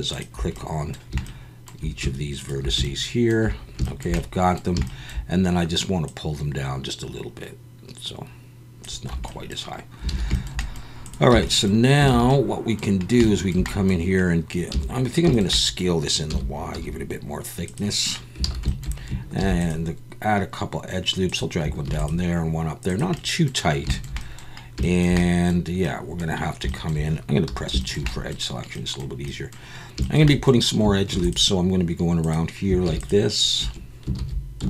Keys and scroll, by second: 9.1 Tab, 10.1 alt+a, 11.3 Tab, 12.1 alt+a, 14.7 a, 16.3 s, 16.7 y, 18.4 alt+a, 19.4 ctrl+r, 21.8 ctrl+r, 27.5 2, 31.1 ctrl+r, 32.8 ctrl+r, 33.6 Escape, 34.2 ctrl+z.